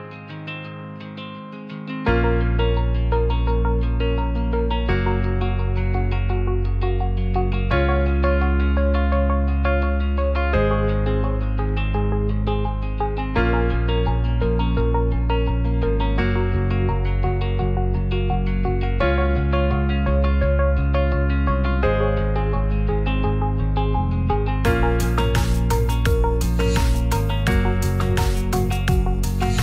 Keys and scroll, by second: 3.0 ctrl+c, 5.2 t, 6.6 ctrl+v, 17.5-18.4 typing.